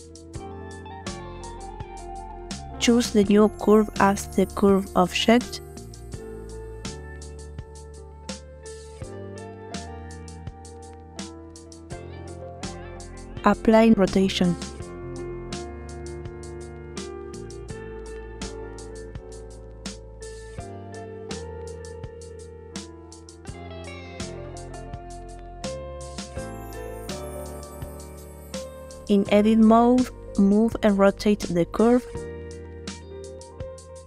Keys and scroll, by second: 28.4 Tab, 29.5 a.